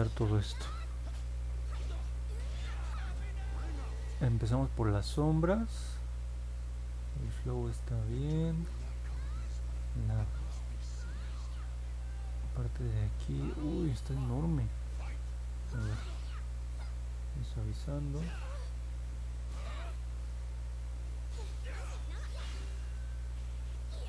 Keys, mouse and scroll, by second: 8.2 click, 15.8 click, 16.7 click, 17.1 click, 17.4 click, 17.8 click, 18.2 click, 18.7 click, 19.2 click, 19.8 click, 21.9 click, 22.3 click, 22.9 click, 23.4 click, 23.7 click.